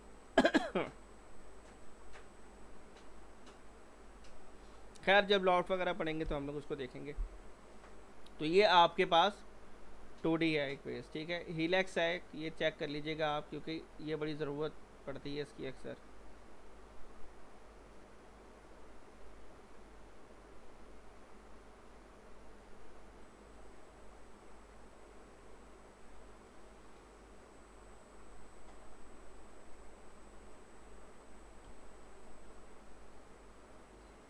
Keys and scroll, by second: 0.3 z.